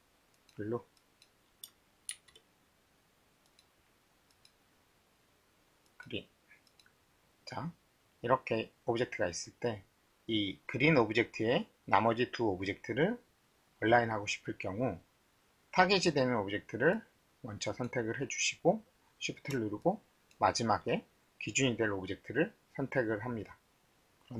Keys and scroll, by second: 2.1 shift+t.